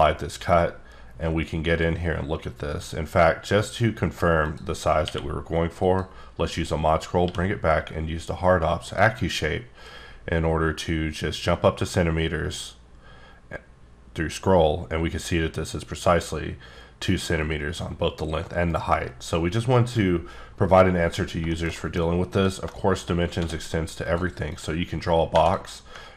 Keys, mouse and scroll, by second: 4.4 click, 4.9 q, 5.8 click, 6.6 click, 7.2 q, 8.8 click, 11.0-12.2 scroll up 2, 12.4-14.2 scroll down 1, 18.7 right click, 20.9 scroll down 3, 21.5 middle click, 21.7 double middle click, 22.0 scroll up 3, 22.3 click, 22.7 shift+middle click, 23.0-23.3 shift+scroll down 2, 23.3 d, 24.0 click, 24.5 click.